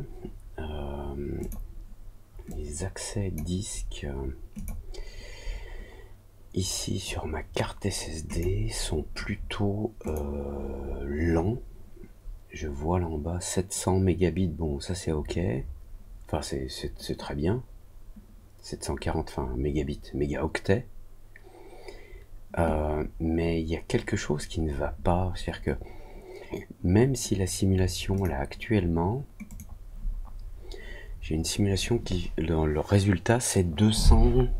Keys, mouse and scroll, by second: 8.2 click, 10.0 click, 28.1 click, 29.4 click.